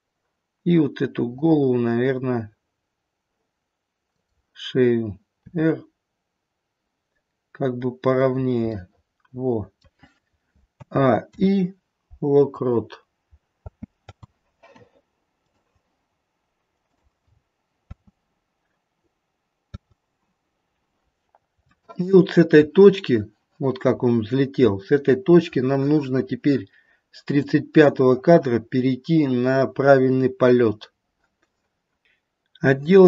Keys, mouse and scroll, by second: 1.3 click, 5.5 click, 5.5 r, 8.7 middle click, 9.7 middle click, 10.7 a, 11.3 i, 13.6 space, 14.0 space, 15.5 click, 16.9 click, 17.3-19.7 scroll down 3, 17.8 space, 19.7 space, 21.6 shift+middle click, 22.4 shift+middle click, 23.9-24.9 scroll up 1, 25.6-26.1 scroll up 1, 27.5 click.